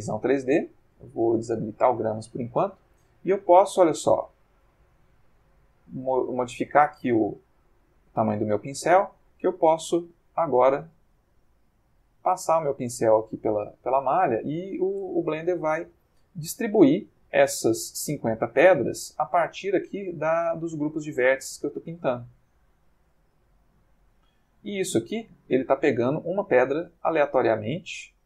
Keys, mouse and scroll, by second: 1.5 click, 4.8 f, 7.3 click, 7.7 click, 8.5 click, 9.5 click, 10.4 click, 11.1 click, 12.0 click, 12.8 click, 13.5 click, 14.4 click, 15.7 click, 16.2 click, 17.2 click, 18.0 click, 18.8 click, 19.5 click, 20.6-25.4 drag, 26.0 click, 27.5-28.2 drag.